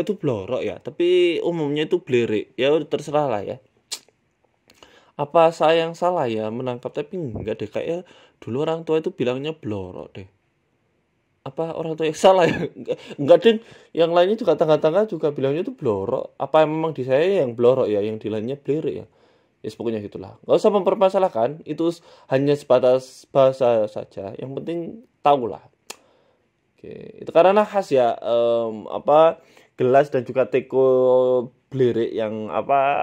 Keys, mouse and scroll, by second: 0.1 s, 1.9 ctrl+r, 4.1 KP_1, 4.4 scroll up 2, 4.5 scroll down 1, 4.6 shift+middle click, 5.1 e, 6.3 ctrl+z, 6.7 g, 8.7 ctrl+b, 10.4 middle click, 11.2 middle click, 12.0 click, 12.8 click, 13.5 right click, 14.0 Delete, 15.6 middle click, 16.3 Tab, 17.0 w, 17.5-17.8 scroll down 5, 17.8 middle click, 19.1 KP_1, 19.4 Tab, 19.7 click, 20.8 1, 21.1 click, 21.8 click, 22.1 s, 22.6 Tab, 22.7 scroll down 3, 22.8 scroll up 2, 23.0 scroll down 1, 24.0 scroll up 2, 24.1 shift+a, 30.0 shift+s, 31.6 shift+a.